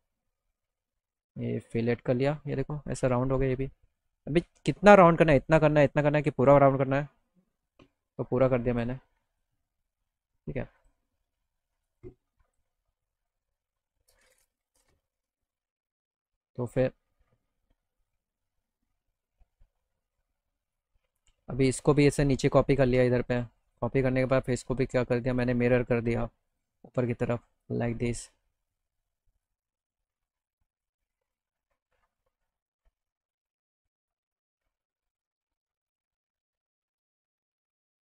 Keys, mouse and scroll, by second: 0.5-2.9 drag, 6.2 click, 8.7 click, 10.8 click, 12.6 click, 18.0 click, 19.1 click, 20.7 click, 21.0 click, 21.8-22.9 shift+drag, 23.7 click, 25.4 click, 26.5 click, 27.6 click, 27.9 click, 28.7 click, 29.5 click, 30.2 click, 31.3 click, 32.7-34.1 drag, 35.1 ctrl+click, 36.0 click, 37.5 middle click.